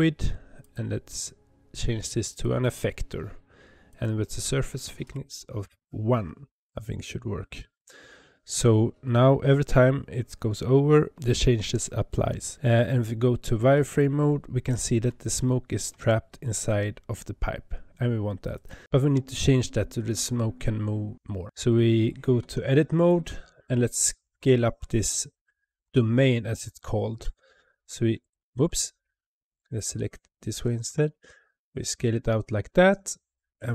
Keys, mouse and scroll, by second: 3.8-6.9 drag, 13.8 click, 14.7 scroll up 2, 15.3-18.4 shift+middle drag, 18.4 click, 18.8 Tab, 22.3 Tab, 23.0 click, 24.0 scroll down 4, 25.7 g, 28.4 ctrl+z, 28.9 click, 30.4 g, 32.7 click.